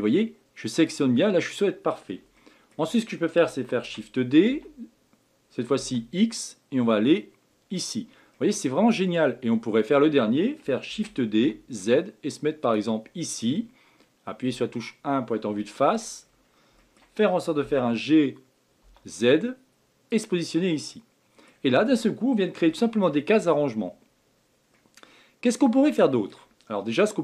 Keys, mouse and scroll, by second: 1.9 scroll down 1, 2.4-3.8 shift+middle drag, 3.8 shift+d, 8.3-9.4 middle drag, 9.4 scroll down 1, 10.9 shift+d, 13.0 scroll up 2, 14.4 KP_1, 15.1 scroll down 2, 15.6-16.2 shift+middle drag, 16.2-16.8 scroll up 5, 16.8 shift+middle click, 17.6 g, 20.5 scroll down 1, 20.9-21.7 middle drag, 21.7-22.7 scroll down 1, 22.7-23.3 shift+middle drag, 23.3 scroll up 2, 24.7-26.7 middle drag, 26.7 scroll down 1.